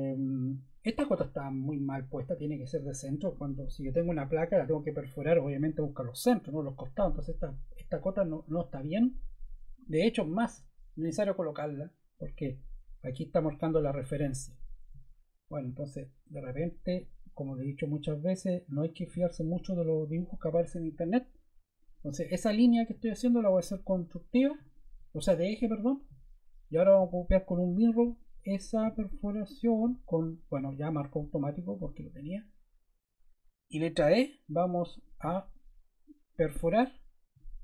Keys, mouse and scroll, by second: 16.2 click, 18.8 click, 19.9 click, 33.6 e.